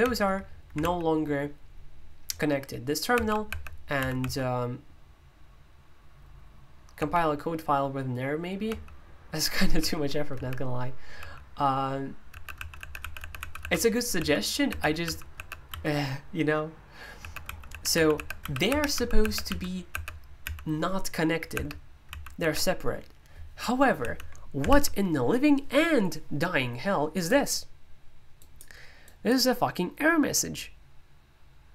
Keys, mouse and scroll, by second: 0.0 super+l, 0.8 super+l, 3.1 super+h, 3.9 super+l, 6.9 super+h, 8.6 super+l, 9.7 super+l, 10.3 super+h, 11.1 super+l, 12.5 super+l, 12.7 super+h, 13.3 super+l, 13.6 super+h, 14.1 super+l, 14.6 super+h, 15.0 super+l, 15.3 super+h, 15.7 super+l, 17.2 super+h, 17.4 super+l, 17.7 super+h, 17.9 super+l, 18.6 super+h, 18.9 super+l, 19.2 super+h, 19.4 super+l, 19.9 super+h, 20.4 super+l, 21.5 super+h, 22.0 super+l, 22.4 super+h, 27.2-31.7 drag.